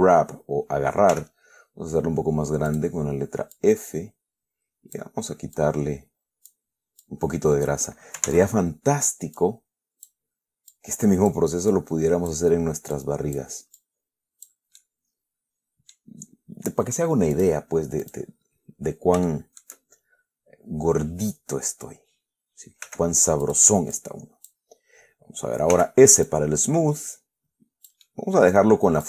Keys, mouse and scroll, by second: 1.4 f, 3.0 click, 3.8-5.4 drag, 5.9-7.0 drag, 7.3 click, 8.6 ctrl+z, 9.7 click, 11.0 click, 12.0 click, 13.2 click, 14.1 click, 15.1-16.2 middle drag, 16.2 scroll up 2, 16.4 scroll down 2, 17.6 click, 18.3 click, 18.8 scroll up 2, 19.5 shift+click, 23.1 f, 23.7 click, 24.2 click, 26.0 s, 26.6-29.0 drag, 28.3-29.0 right drag.